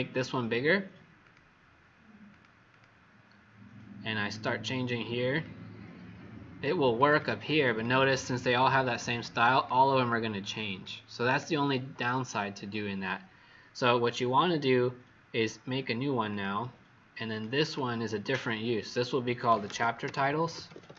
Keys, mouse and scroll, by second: 1.2 click, 2.7 click, 4.2 click, 5.5 click, 6.9 click, 7.2 click, 7.3 click, 7.5 click, 7.7 click, 8.0 click, 8.2 click, 8.4 click, 8.6 click, 10.0 click, 17.5 click, 19.3-20.9 typing.